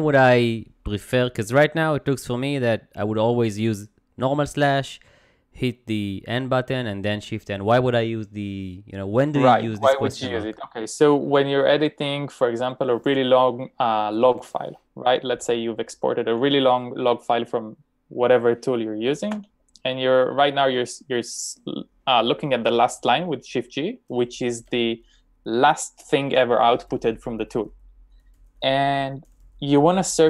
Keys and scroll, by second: 19.7 g.